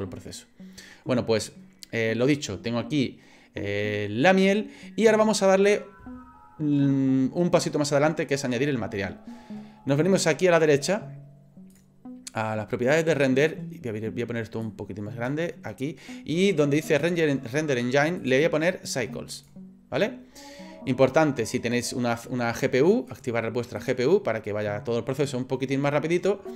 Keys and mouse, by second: 14.7 click, 18.2-19.5 drag, 23.1 click.